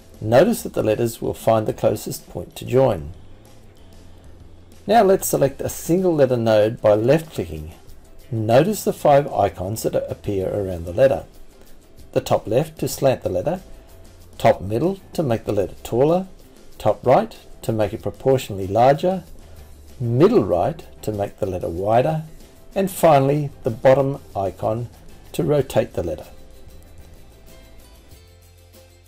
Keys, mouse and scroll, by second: 5.7-10.7 drag, 21.4 click, 22.2 click, 22.8 click, 23.0 click, 25.3 click, 26.7 click, 26.9 click.